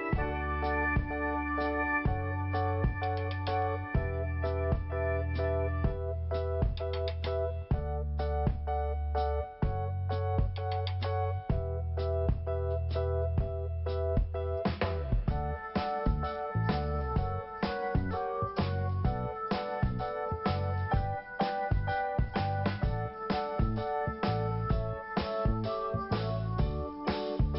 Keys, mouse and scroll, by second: 0.3 click, 0.4 click, 2.0 click, 4.1 scroll down 1, 5.1 click, 10.0 click, 11.1 click, 11.9 scroll up 1, 12.6 click, 12.7 click, 13.6 click, 13.7 click, 14.7 click, 14.8 click, 15.1 click, 15.2 click, 15.8 click, 15.9 click, 16.0 click, 16.1 click, 17.7 click, 18.0 click, 19.0 click, 19.1 click, 19.7 click, 19.7 click, 22.3 click, 25.2 click, 26.3 scroll up 1, 27.5 scroll up 1.